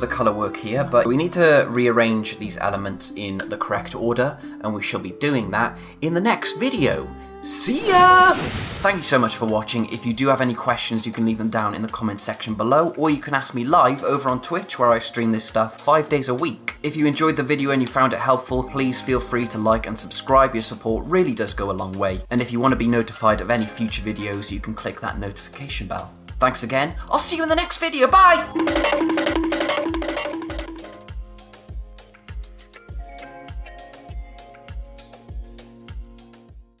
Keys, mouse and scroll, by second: 1.0 click.